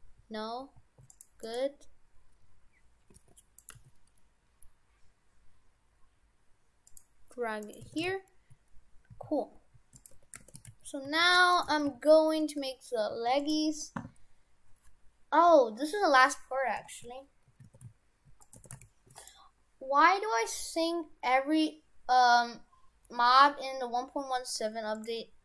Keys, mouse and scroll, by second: 1.4 right click, 2.0-2.7 scroll down 2, 2.7-3.1 scroll up 3, 3.1 g, 3.8 g, 7.7 right click, 7.9 shift+f, 10.2 Tab, 10.4 shift+f, 11.6 right click, 11.7 shift+f, 17.8 shift+f, 18.6 shift+f.